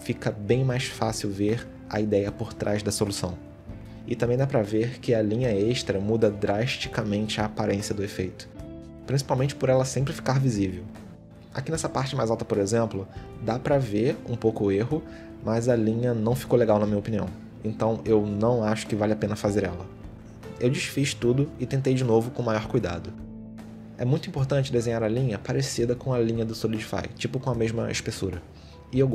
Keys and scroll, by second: 1.7 ctrl+z, 5.4 ctrl+shift+z, 7.1 ctrl+z, 8.0 ctrl+z, 12.4 shift+x, 13.9 ctrl+z, 14.8 ctrl+z, 15.2 ctrl+z, 18.2 ctrl+z, 20.4 shift+x, 20.9 ctrl+z, 21.6 shift+x, 22.3 ctrl+z, 23.4 shift+x, 25.3 ctrl+z, 26.2 shift+x, 27.0 ctrl+z, 28.5 ctrl+Tab.